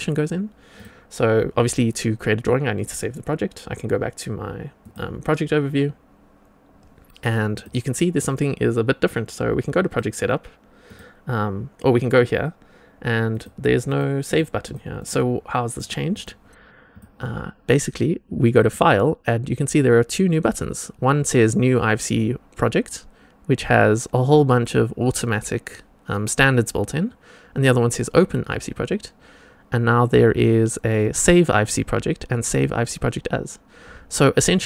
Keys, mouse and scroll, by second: 0.7 click, 4.7 click, 7.4 click, 9.8 click, 10.8 click, 13.2 click, 13.8 click, 14.2 click, 14.6 click, 14.9 click, 15.7 click, 16.0 click, 16.8 click, 18.5-34.6 drag.